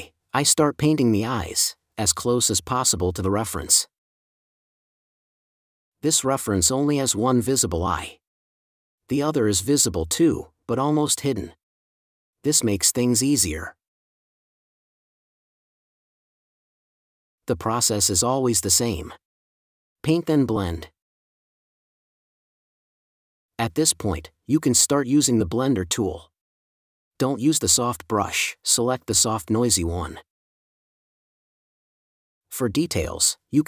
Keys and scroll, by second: 3.8 4, 10.7 space, 20.5 space, 22.0 super+space, 32.6 4.